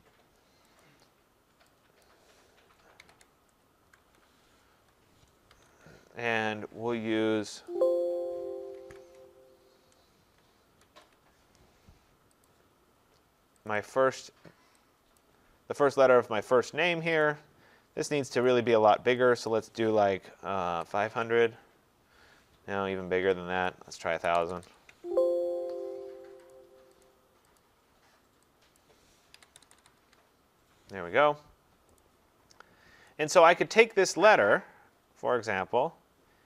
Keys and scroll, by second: 3.9 Tab, 8.7 ctrl+a, 21.3 Tab, 30.0 Tab.